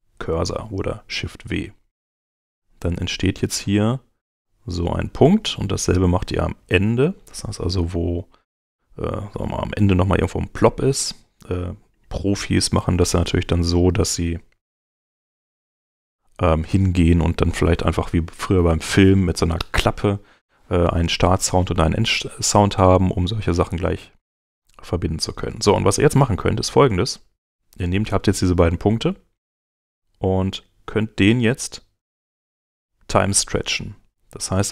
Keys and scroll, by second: 14.9 shift+w.